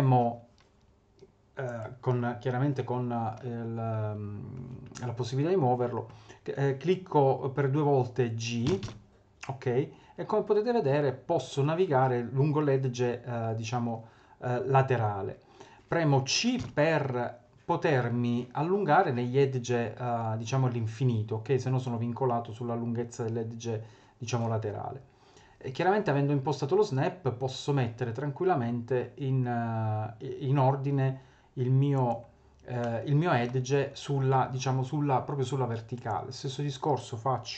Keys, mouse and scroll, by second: 1.7 click, 8.7 g, 32.8 middle click, 33.4 middle click, 35.9 click.